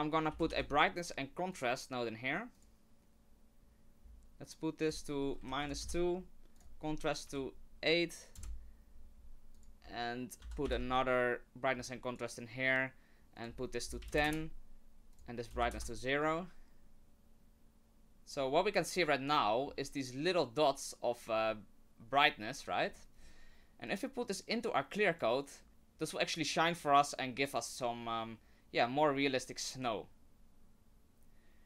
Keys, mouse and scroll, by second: 4.0-4.8 scroll up 3, 4.8 click, 6.6 click, 9.5 click, 10.4 ctrl+c, 10.7 ctrl+v, 11.0 click, 13.4 click, 15.1 click, 19.7 scroll up 3, 21.3-22.7 scroll down 3, 23.2 middle click, 23.2 scroll down 1, 23.8 click.